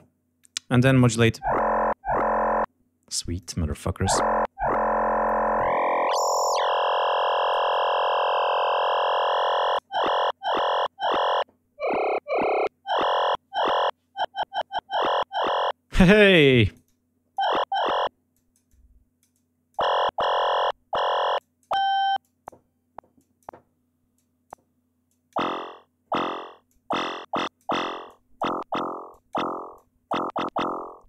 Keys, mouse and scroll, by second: 0.3 click, 3.3 click, 5.4-9.8 drag, 16.2-17.4 drag, 18.2-19.8 drag, 21.2 click, 22.1 click, 23.0 click, 24.0 click, 24.9 click, 26.6 click, 27.2 click, 27.9 click, 29.0 click, 29.6 click.